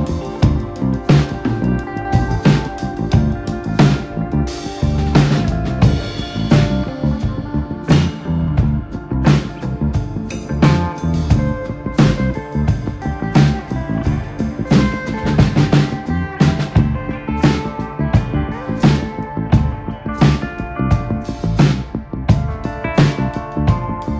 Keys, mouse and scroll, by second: 0.7 click, 1.1 click, 1.5 alt+/, 2.0 g, 3.5 click, 3.7 click, 4.4 click, 6.5 Tab, 6.9 alt+/, 7.1 click, 7.3 scroll down 2, 7.4-8.0 shift+middle drag, 8.0 click, 8.2 scroll up 1, 9.0-10.0 drag, 12.7-13.0 scroll up 2, 13.0-13.7 middle drag, 13.7 KP_1, 14.1 Tab, 16.6 Tab, 17.0-18.0 right drag, 19.0-20.0 drag, 20.1 Tab, 20.5 click, 20.8-21.7 scroll up 1, 21.7 ctrl+z, 21.9 ctrl+z, 22.8 click, 23.1-24.1 drag.